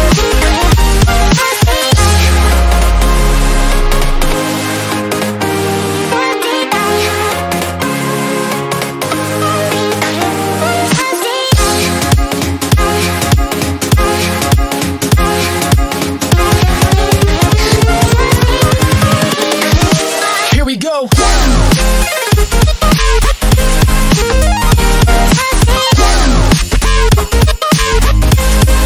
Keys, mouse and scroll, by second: 4.6-5.4 scroll up 1, 5.8 click, 6.6 ctrl+z, 8.0 click, 12.6 click, 12.9-13.7 scroll, 13.7 scroll down 1, 14.2 click, 16.1 Right, 18.0 click, 18.2-19.0 scroll down 1, 19.2-22.8 drag, 23.1 ctrl+click, 24.4 ctrl+right click, 25.2 ctrl+click, 26.5 ctrl+right click, 27.1 ctrl+click.